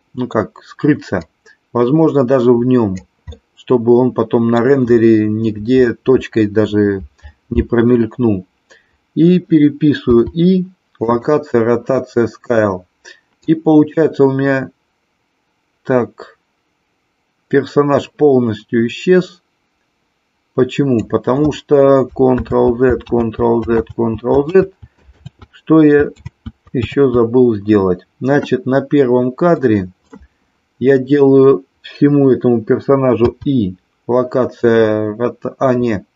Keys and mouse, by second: 0.0 middle click, 1.2-3.0 drag, 3.3-4.6 middle drag, 9.9 i, 13.5-21.0 drag, 22.6 ctrl+z, 23.2 ctrl+z, 24.0 ctrl+z, 24.6 ctrl+z, 25.4 ctrl+z, 26.4 ctrl+z, 27.0 ctrl+z, 29.6 click, 33.1 i.